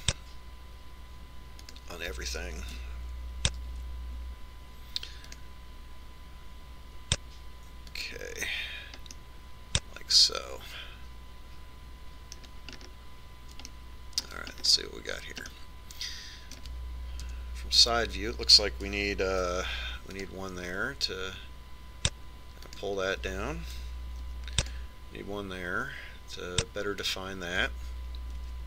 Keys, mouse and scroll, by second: 5.5 ctrl+r, 10.9-12.7 middle drag, 14.5-15.5 scroll up 1, 15.5-19.1 middle drag, 19.1 KP_3, 19.2 middle click, 21.2 ctrl+r, 26.1 ctrl+r.